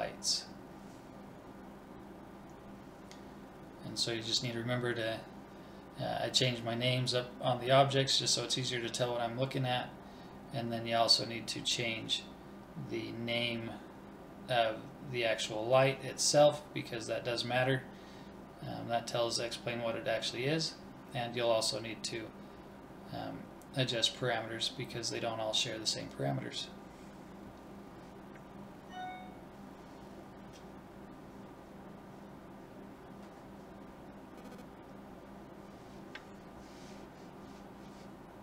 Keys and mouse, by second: 0.0-1.8 middle drag, 1.8 click, 2.6 BackSpace, 3.7 Right, 4.1 BackSpace, 6.4 click, 6.7 BackSpace, 7.9 click, 8.6 BackSpace, 9.1 Right, 9.4 BackSpace, 9.9 Right, 10.1 BackSpace, 10.8 click, 11.4 BackSpace, 12.0 Right, 12.5 BackSpace, 13.4 click, 14.4-15.5 middle drag, 15.5-17.4 drag, 17.2 BackSpace, 26.2-28.1 drag, 29.7 Right.